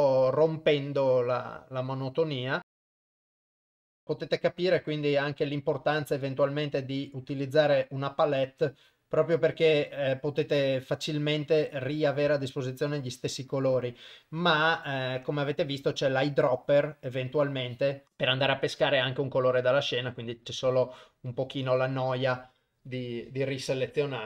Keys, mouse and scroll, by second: 0.3 shift+right click, 1.4 click, 3.0 shift+right click, 3.2 click, 5.2 shift+right click, 6.0 click, 8.6 click, 10.5 click, 11.6 click, 12.7 shift+right click, 13.2 click, 14.1 click, 15.9 shift+right click, 17.3 click, 18.0 shift+right click, 18.2 shift+right click, 19.1 click, 20.4 click, 21.3 click.